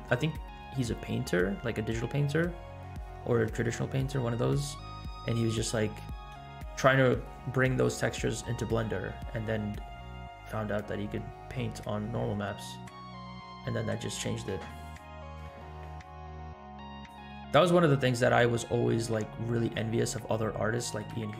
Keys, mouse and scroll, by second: 6.0 scroll up 2, 11.2-11.5 scroll up 2, 12.5 scroll down 1, 12.6 scroll down 1, 13.6 scroll up 1, 17.0 click, 18.2 scroll down 2, 18.7 scroll down 1, 20.3-21.1 shift+middle drag.